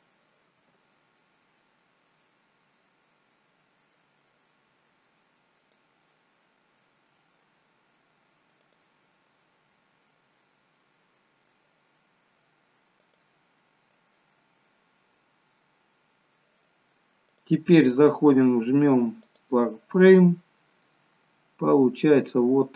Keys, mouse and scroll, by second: 0.6 Tab, 1.3-2.3 scroll up 2, 1.8 middle click, 5.6 click, 6.6 middle click, 6.6-8.8 scroll up 1, 8.8 click, 9.9-10.6 scroll down 1, 10.6 middle click, 10.6-11.7 scroll down 1, 13.0 click, 17.3 click, 20.3-22.6 scroll up 3, 20.7 middle click.